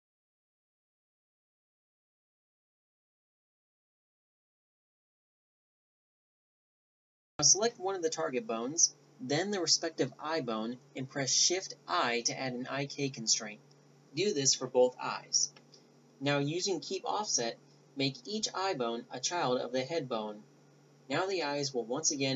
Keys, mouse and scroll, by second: 0.4-3.2 typing, 2.1 ctrl+p, 2.8 ctrl+p, 4.4 g, 6.6 middle click, 6.9 a, 7.1 middle click, 7.4 right click, 8.5 shift+i, 9.9 a, 10.3 middle click, 10.5 middle click, 10.7 middle click, 12.7 right click, 14.1 a, 14.2 z, 16.5 middle click, 18.7-20.4 typing, 19.0 middle click, 19.0 click, 20.7 click.